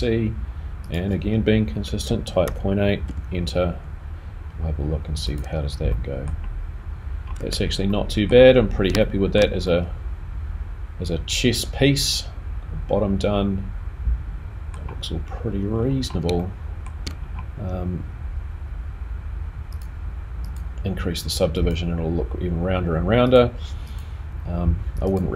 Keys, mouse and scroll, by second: 0.8 click, 5.9 middle click, 7.1 scroll down 1, 7.4 Tab, 7.9 middle click, 8.5-8.9 scroll down 2, 9.0 shift+middle click, 9.6 middle click, 15.6 scroll down 3, 15.8-16.3 scroll up 7, 16.5 shift+middle click, 17.2 scroll down 1, 19.7 click, 20.4 click, 22.8 click, 23.3 click.